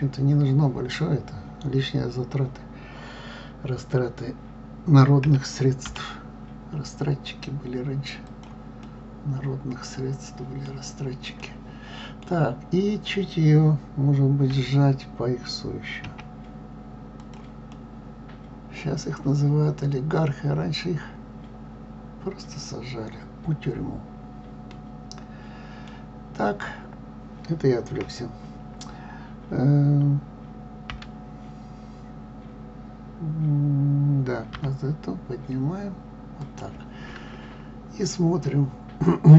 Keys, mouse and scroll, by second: 5.2 s, 8.8-14.5 middle drag, 14.5 s, 17.7-20.7 middle drag, 27.8 KP_3, 30.9 g.